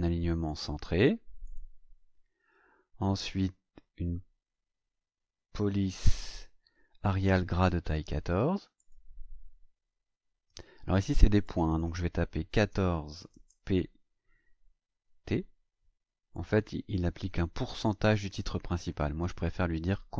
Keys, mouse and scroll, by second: 0.4 click, 1.4 click, 8.8 click, 11.4 click, 12.5 KP_1, 12.6 KP_4, 13.4 p, 15.0 t, 16.3 click.